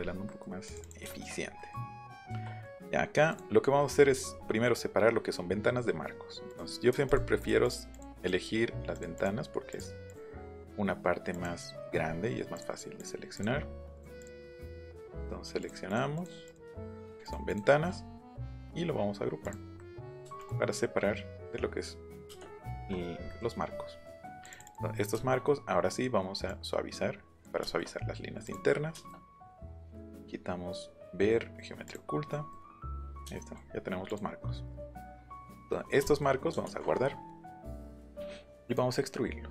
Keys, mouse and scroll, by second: 0.0 middle click, 0.7 click, 1.0 shift+middle click, 1.6 middle click, 2.0 shift+middle click, 2.6 middle click, 3.3 click, 4.0-4.6 scroll up 1, 4.9-6.2 scroll down 1, 6.5 click, 7.1 shift+click, 7.4 shift+click, 7.6 shift+click, 8.0 shift+click, 8.9 shift+click, 9.2 shift+click, 9.7 shift+click, 10.1 shift+click, 11.3 shift+click, 12.0 scroll down 2, 12.1 shift+middle click, 12.5 shift+click, 13.0 shift+click, 13.3 shift+click, 13.9 shift+click, 14.2 shift+click, 14.4 shift+click, 14.6 shift+middle click, 14.9 shift+click, 15.9 shift+click, 16.1 shift+click, 16.5 shift+click, 17.0 shift+click, 17.2 shift+click, 17.5 shift+click, 18.4 click, 19.4 click, 20.4 click, 22.3 space, 22.8 shift+click, 23.6-24.1 scroll up 2, 24.9 scroll up 1, 25.3 middle click, 26.4-27.4 drag, 27.6 shift+middle click, 28.4 click, 28.9 shift+middle click, 30.1 click, 31.8 middle click, 32.5 middle click, 33.3 shift+middle click, 34.0 middle click, 34.8 middle click, 35.2 shift+middle click, 35.6 middle click, 36.6 ctrl+s.